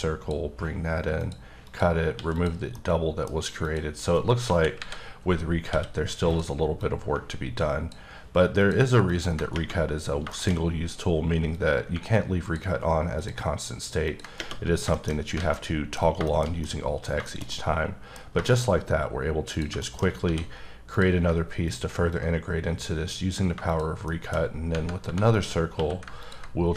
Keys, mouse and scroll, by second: 1.6 click, 2.1 x, 2.3 click, 2.7 middle click, 3.6 click, 4.4 KP_1, 4.7 KP_3, 5.5 scroll up 3, 5.6 d, 6.2 click, 6.8 click, 8.6 ctrl+click, 9.1 ctrl+double click, 10.0 scroll down 3, 10.3 shift+middle click, 10.4-10.9 shift+scroll up 4, 11.5 click, 13.1 ctrl+click, 14.0 ctrl+double click, 14.6-15.2 scroll down 5, 14.9 shift+middle click, 15.3 alt+a, 15.5 middle click, 15.9 scroll down 2, 16.2 shift+middle click, 18.1-18.4 scroll down 2, 18.5 shift+middle click, 18.6 shift+scroll up 2, 19.5 click, 19.8 shift+middle click, 20.0 shift+scroll up 3, 20.2 d, 20.9 click, 22.4 click, 24.0 shift+middle click, 24.3-24.7 shift+scroll up 3, 25.0 3, 25.3 click, 25.7 q, 26.2 ctrl+click.